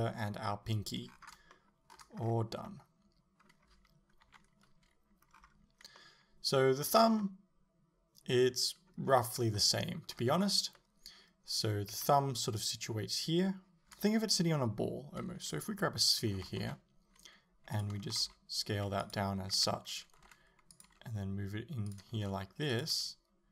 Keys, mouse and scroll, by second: 1.6 shift+middle click, 2.2 scroll down 1, 2.7 middle click, 4.3 KP_7, 5.4-6.0 scroll up 1, 6.0 middle click, 6.8-7.2 scroll down 1, 7.2 middle click, 9.1-9.6 scroll up 1, 9.6 shift+middle click, 10.8-17.8 middle drag, 12.0 KP_7, 13.8 scroll down 1, 15.6 shift+a, 16.5 s, 17.8 click, 18.2 s, 19.2 click, 19.6 KP_7, 20.3 r, 20.9 click, 21.9 g, 22.0 click, 22.2 s, 22.8 click, 23.0 g.